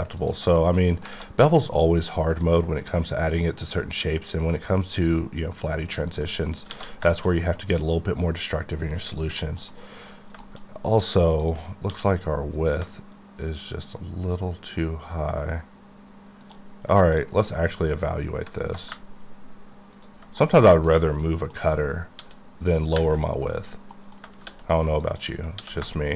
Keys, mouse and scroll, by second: 0.2 alt+click, 0.9 middle click, 1.2 alt+a, 1.5-3.3 scroll up 2, 3.5 middle click, 3.7 scroll up 1, 6.0-6.3 scroll down 1, 6.3 middle click, 6.5 scroll down 4, 6.7 alt+a, 7.1 shift+middle click, 7.8-9.1 middle drag, 9.1 scroll up 2, 9.4 shift+middle click, 10.2 scroll up 2, 10.5 shift+middle click, 11.4 click, 11.6 click, 16.4 shift+right click, 16.8 scroll down 3, 17.0 middle click, 17.5 middle click, 17.7-18.4 scroll down 9, 19.0-19.6 ctrl+scroll down 1, 19.8 scroll down 1, 20.0 ctrl+click, 20.4 ctrl+click, 20.5 KP_Decimal, 21.0 middle click, 21.7-22.2 scroll up 2, 22.2 s, 23.2 scroll down 3, 23.5 middle click, 23.8 scroll up 1, 24.0 middle click, 24.4 shift+s, 25.1 click, 25.6 s.